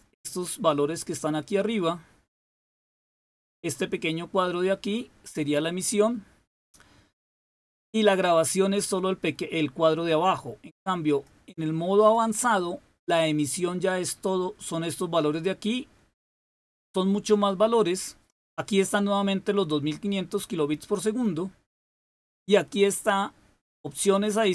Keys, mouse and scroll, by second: 11.0 click, 11.9 click, 23.9 click.